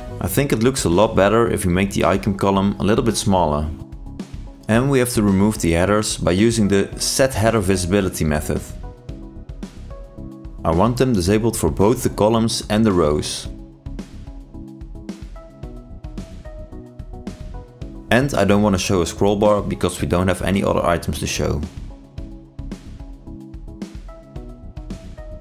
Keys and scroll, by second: 8.8 ctrl+space, 10.2 ctrl+shift+i, 11.6 ctrl+space, 22.3 ctrl+space.